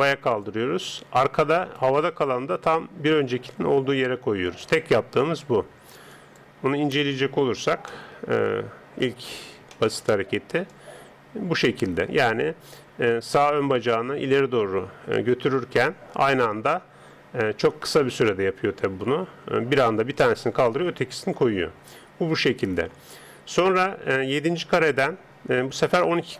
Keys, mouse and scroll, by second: 1.6 right click, 2.3 g, 6.1 click.